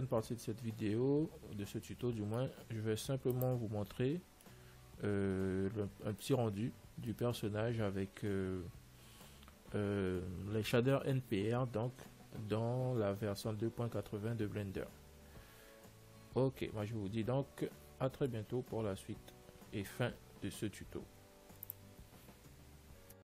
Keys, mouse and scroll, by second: 2.1-4.1 middle drag, 3.4 ctrl+s, 6.8-21.2 middle drag, 21.8 ctrl+s.